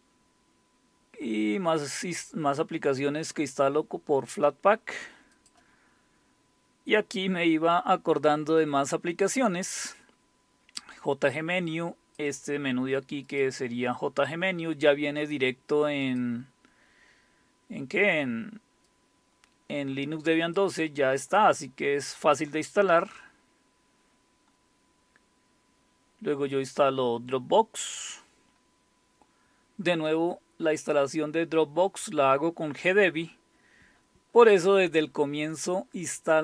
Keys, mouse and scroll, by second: 0.0-1.3 scroll down 3, 4.4 click, 5.4-6.4 drag, 6.5-7.0 scroll down 1, 7.0-8.2 scroll down 1, 8.2-9.7 scroll down 1, 9.7-10.9 scroll down 1, 10.9-13.3 drag, 13.4 click, 15.2-18.2 drag, 18.9-22.1 drag, 23.1-24.2 scroll down 2, 24.2-25.4 scroll down 1, 25.4-26.2 scroll down 1, 29.0-29.7 scroll down 2, 30.1 click, 31.5 click, 34.0-36.4 scroll up 2.